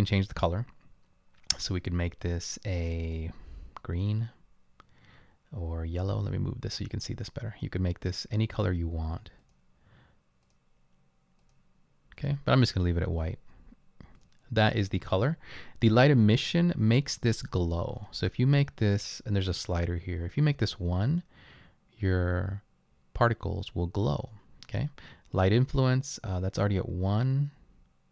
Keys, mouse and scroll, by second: 14.2 click.